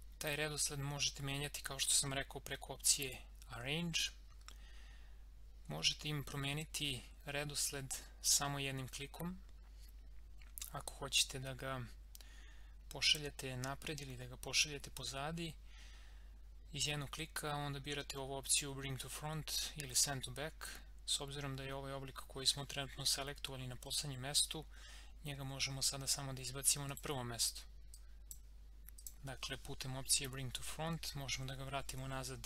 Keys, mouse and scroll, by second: 2.8 click, 26.9 click.